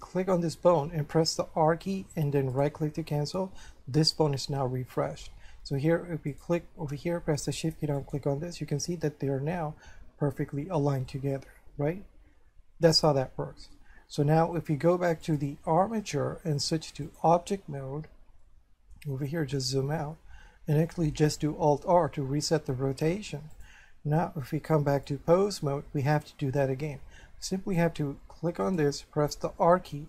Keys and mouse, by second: 1.5 r, 2.7 right click, 6.3 right click, 8.0 shift+right click, 11.1 middle click, 15.3 click, 16.6 click, 18.4 shift+middle click, 21.7 alt+r, 23.5 click, 24.9 click, 25.6 shift+middle click, 28.7 right click, 29.6 r.